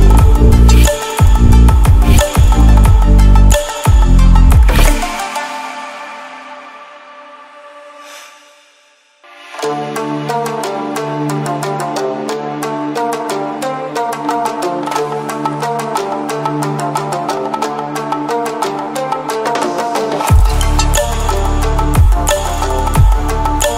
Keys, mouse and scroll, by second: 0.8 ctrl+alt+scroll down 1, 1.3 ctrl+alt+scroll down 1, 2.1-3.1 drag, 10.2-11.2 drag, 15.0 ctrl+w, 17.0 ctrl+w, 18.0-18.9 drag, 20.0 ctrl+w, 22.9 ctrl+w.